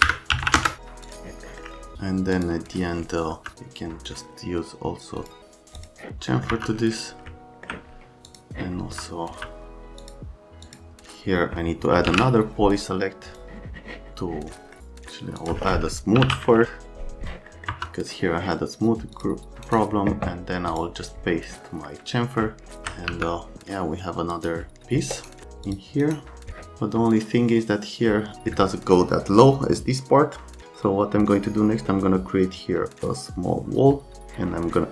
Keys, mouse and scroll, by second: 0.0 KP_Subtract, 0.3 KP_2, 0.4 KP_0, 0.6 KP_Enter, 1.1 click, 5.2 click, 5.8 click, 6.3 middle click, 6.5 F3, 7.3 alt+middle click, 8.8 F3, 9.3 F3, 10.0 click, 10.7 click, 11.7-12.6 typing, 13.3 click, 14.7 right click, 14.8 click, 15.4 click, 15.9-16.7 typing, 17.5 right click, 17.7 F3, 19.2 click, 19.7 scroll up 1, 20.7 click, 21.7 right click, 22.8 alt+middle click, 23.1 x, 24.3 click, 25.1 right click, 25.7 click, 26.0 right click.